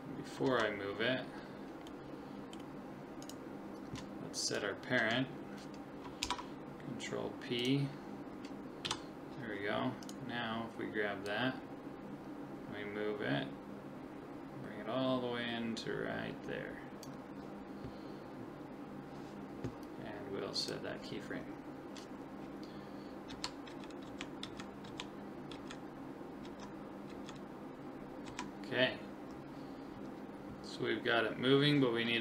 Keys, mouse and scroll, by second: 0.6 ctrl+z, 1.9-3.2 middle drag, 3.2-6.4 right drag, 6.2 ctrl+p, 8.9 KP_7, 10.0-11.8 right drag, 11.3 click, 20.6 click, 23.3 Left, 23.7 Right, 24.1 Left, 24.4 Right, 24.9 Left, 25.5 Right, 26.5 Left, 27.1 Right, 28.3 Left.